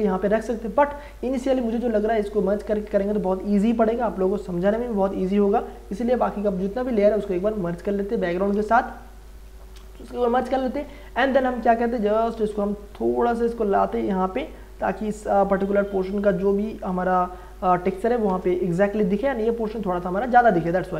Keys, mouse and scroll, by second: 6.5 click, 8.1 shift+click, 9.2 ctrl+e, 10.5 ctrl+e, 12.1 ctrl+t, 12.9-18.3 drag, 18.3 Return.